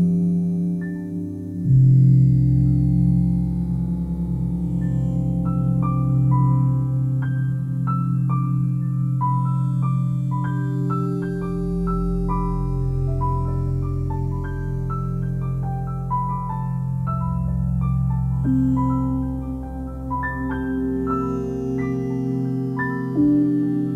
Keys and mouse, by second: 0.2 click, 1.5 alt+click, 3.6 click, 4.6 click, 6.0 g, 8.1 y, 9.1 click, 9.8 g, 10.2 z, 10.6 x, 12.0 click, 12.5-15.2 alt+drag, 16.0 g, 16.4 z, 17.2 click, 17.9 r, 18.6-22.4 x, 19.6 click, 20.6 click, 21.1 click, 21.4 click.